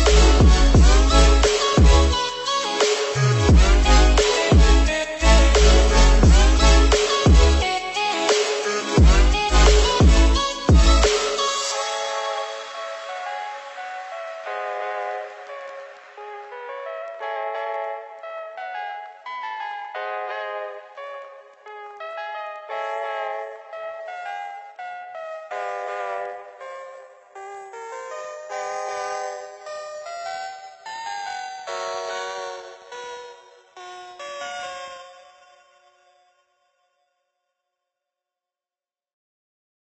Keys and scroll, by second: 8.1 ctrl+c, 8.2 ctrl+v, 23.8 ctrl+c, 24.0 ctrl+v, 36.6 Down.